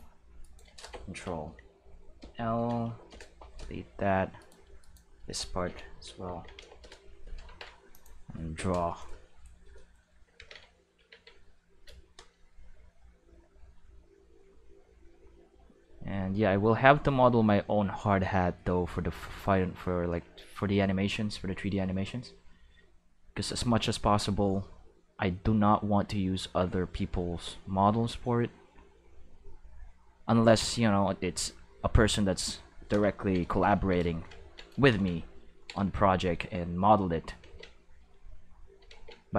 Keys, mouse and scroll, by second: 0.4 click, 0.4 right click, 2.1 ctrl+c, 2.8 x, 3.1 Return, 4.4 right click, 4.8 shift+right click, 6.2 ctrl+l, 6.5 x, 6.8 Return, 7.4 ctrl+Tab, 7.9 click, 10.3 ctrl+s, 10.9 ctrl+Tab, 11.4 click, 13.3-23.5 drag, 24.7 click, 25.0 click, 26.2-27.4 drag, 27.9-29.2 drag, 30.1-32.4 drag, 33.5 shift+middle click, 36.6 click, 37.4 ctrl+z, 37.8 click, 38.8 ctrl+z.